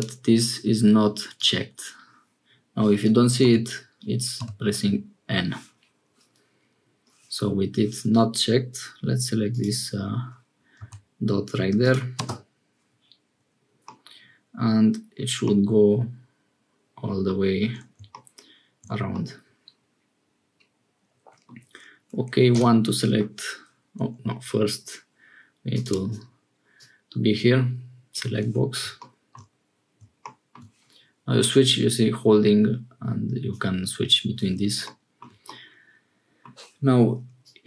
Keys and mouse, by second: 1.3 click, 3.4 n, 4.3 n, 9.4-12.6 drag, 13.8 click, 15.4-17.3 drag, 18.7 middle click, 19.1-21.5 middle drag, 22.5 1, 25.7 middle click, 26.7-28.2 middle drag, 31.4-33.5 middle drag, 35.5 middle click, 37.5 click.